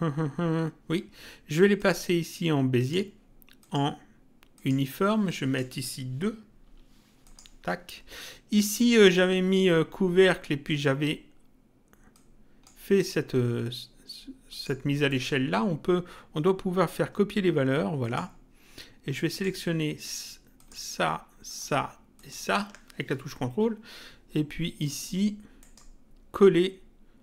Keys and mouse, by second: 1.7 click, 7.2 click, 8.5 click, 12.1 click, 14.5 click, 15.1 right click, 18.0 click, 19.3 click, 20.5 click, 21.5 ctrl+click, 25.6 right click.